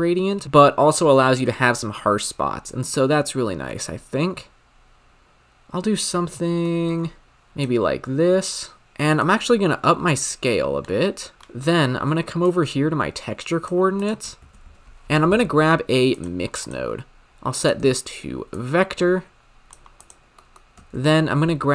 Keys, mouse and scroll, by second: 2.9-6.0 drag, 7.5-8.9 drag, 9.3-11.3 drag, 11.3 scroll down 10, 11.6 middle click, 12.4 click, 13.9-14.5 drag, 14.5 shift+a, 16.9-17.5 scroll up 3, 17.5-18.7 drag, 20.0 click, 20.3 middle click, 21.0 shift+a.